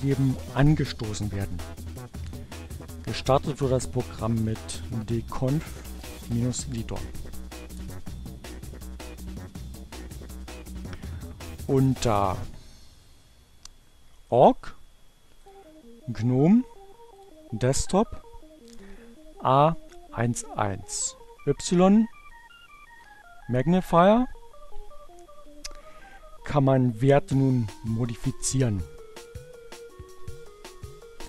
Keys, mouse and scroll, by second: 1.2 BackSpace, 3.5-6.3 typing, 6.4 Return, 10.0 click, 11.5-12.9 drag, 15.0 click, 15.8 click, 17.1 click, 19.0-21.0 drag, 21.6-22.7 drag, 22.8 click, 27.9-31.2 drag.